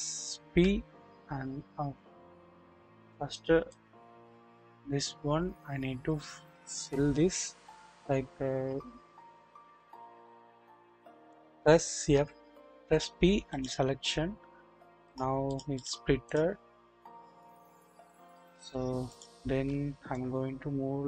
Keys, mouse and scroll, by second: 0.5 p, 2.4-3.5 scroll up 1, 3.7-6.8 drag, 12.1 p, 15.1-15.5 drag, 15.1 scroll down 1, 17.5-18.6 drag, 20.1-21.0 drag.